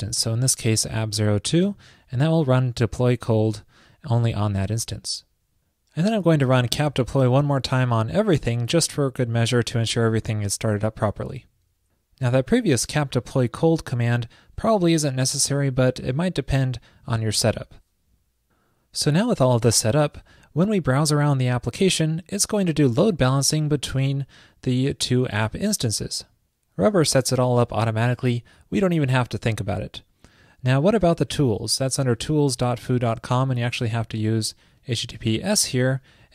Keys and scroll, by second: 33.2 alt+Left, 34.5 alt+Right, 34.6 alt+Right, 35.7 alt+Left.